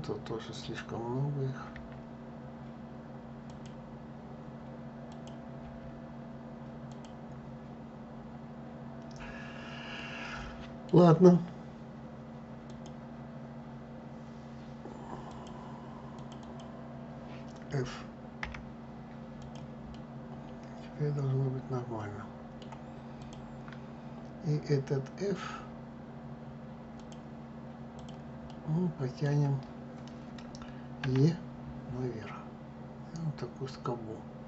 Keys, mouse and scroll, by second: 0.3 click, 1.4 Delete, 4.8 click, 5.3 Delete, 7.5 scroll down 2, 9.6-12.3 middle drag, 12.3-15.1 drag, 15.8 click, 16.1 click, 18.1 f, 19.1 click, 19.6-22.6 middle drag, 22.9 click, 26.7 click, 27.6 click, 28.2-30.7 middle drag, 30.7 e.